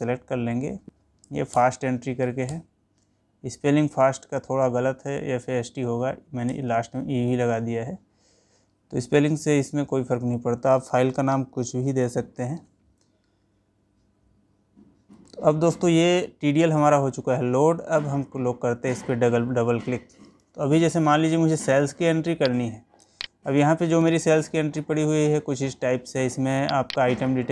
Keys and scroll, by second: 14.6 Escape.